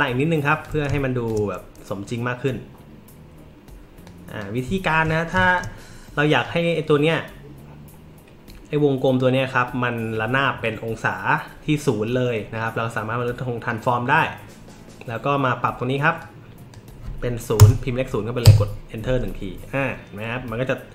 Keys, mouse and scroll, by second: 0.9 space, 0.9 click, 4.0 click, 5.3 space, 5.4 click, 13.6 click, 16.2 click, 17.6 KP_0, 18.4 Return.